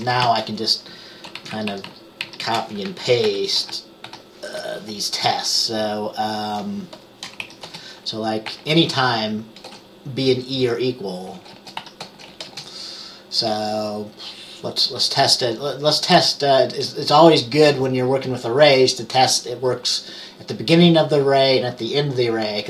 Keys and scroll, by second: 0.4 Right, 1.5 shift+Down, 1.7 shift+Down, 1.8 shift+Down, 2.0 shift+Down, 3.4 ctrl+c, 3.7 ctrl+v, 4.2 ctrl+v, 7.7 Up, 7.8 Return, 8.6 typing, 9.8 typing, 11.5-12.6 typing.